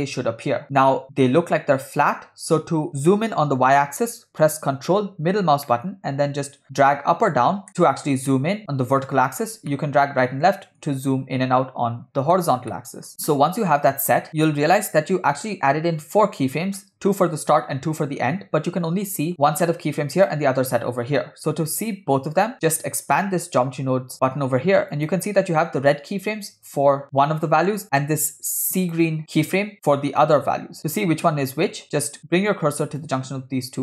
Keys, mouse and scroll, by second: 0.8-1.3 scroll up 4, 1.3 scroll down 3, 5.7-8.7 ctrl+middle drag, 9.7-12.7 ctrl+middle drag, 12.7 middle click, 14.2 scroll down 2, 14.3 click, 14.3 scroll up 2, 19.3 click, 20.2 click, 23.1 click, 24.9 click, 28.8 click, 33.0-33.8 drag.